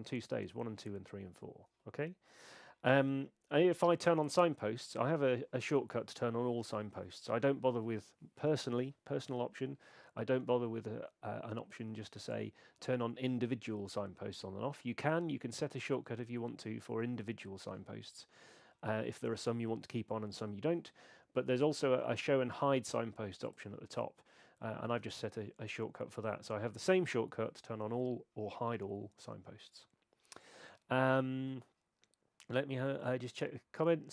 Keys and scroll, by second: 4.5 alt+super+s.